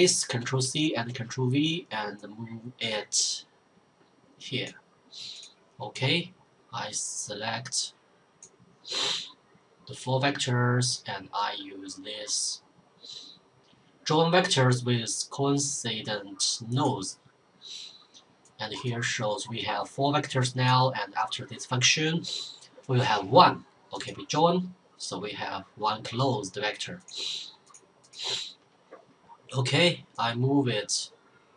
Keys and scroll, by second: 0.3 ctrl+v.